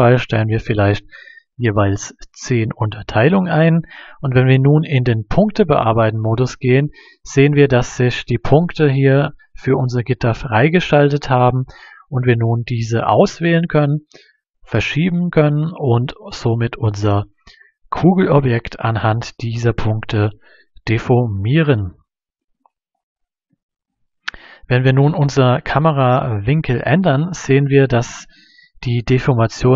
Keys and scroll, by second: 0.0-0.5 typing, 2.4 1, 2.9 Return.